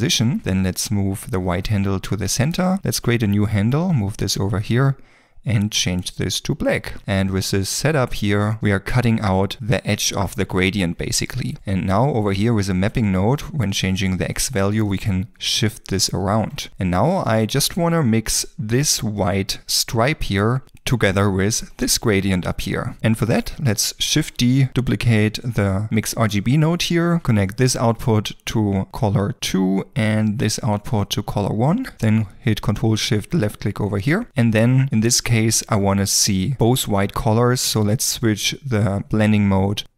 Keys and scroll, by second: 24.1 shift+d.